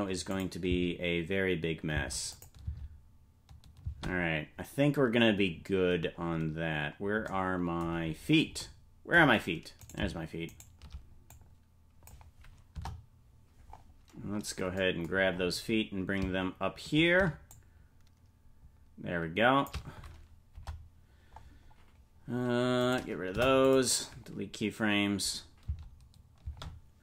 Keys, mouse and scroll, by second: 0.3 click, 0.6 space, 2.3 click, 2.3 space, 2.6 space, 5.5-6.8 scroll down 3, 5.5 space, 7.2 scroll down 2, 7.9-8.5 scroll down 4, 9.9 right click, 11.3 click, 12.7 KP_0, 13.6-14.1 scroll up 3, 14.1-14.7 scroll down 1, 14.7-17.4 scroll down 8, 17.4 scroll down 3, 17.5-19.7 shift+drag, 20.5 KP_0, 21.3-22.3 scroll up 1, 22.3 scroll up 2, 22.7 right click, 23.3 Delete, 24.6-25.6 scroll up 2, 25.6 space.